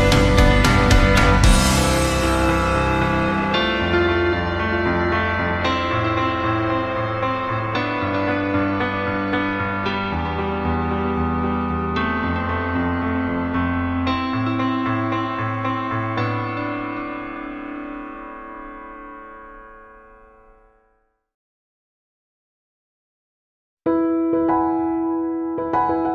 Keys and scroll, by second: 9.9 Left.